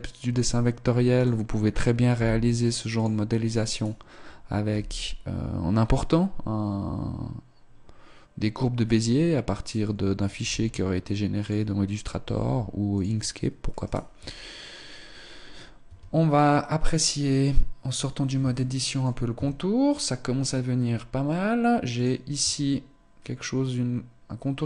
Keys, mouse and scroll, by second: 1.2 right click, 2.2 v, 3.8 right click, 4.7 g, 9.6 right click, 10.4 s, 11.5 click, 12.2 g, 13.8 right click, 15.6 scroll down 2, 15.6 Tab, 18.6 shift+middle click, 19.0 Tab, 22.0 right click, 22.4 Tab.